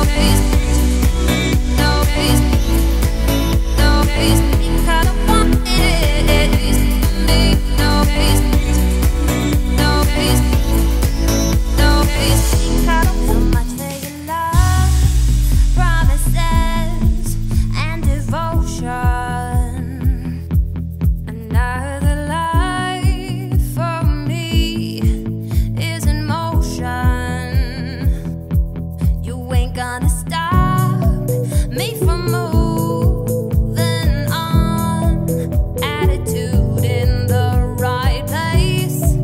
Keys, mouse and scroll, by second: 0.2 scroll down 1, 0.4 g, 2.8 g, 4.0-7.2 drag, 23.1 scroll up 2, 23.7-24.2 scroll down 2, 24.6-25.2 scroll up 2, 25.2 click, 25.8 scroll down 1, 26.5 scroll down 1, 26.6-27.3 middle drag, 27.3-27.7 scroll up 3, 27.7-29.6 shift+middle drag, 29.6-30.0 scroll up 1, 30.0-30.8 shift+middle drag, 30.8 Tab, 31.6 shift+right click, 32.0 Tab, 32.5 shift+a, 34.4 scroll down 2, 35.1-35.5 scroll up 4, 35.5 scroll down 1, 35.5-36.0 middle drag, 36.0 Tab, 36.2-36.6 scroll up 2, 36.6 a, 37.0-38.4 shift+middle drag, 38.4 /, 38.8-39.2 scroll down 3.